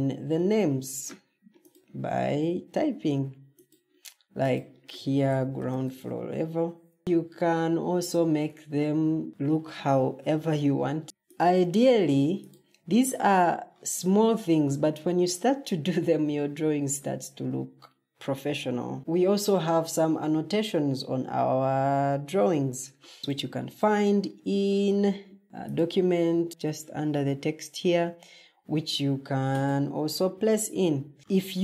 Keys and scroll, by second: 0.0-2.7 typing, 5.2-5.5 typing, 9.3 ctrl+t, 10.3-11.2 typing, 12.7 Escape.